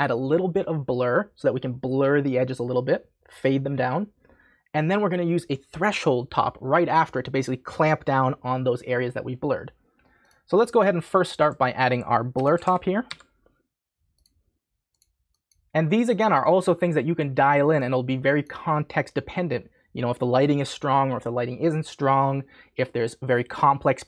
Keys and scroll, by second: 12.1-13.5 typing.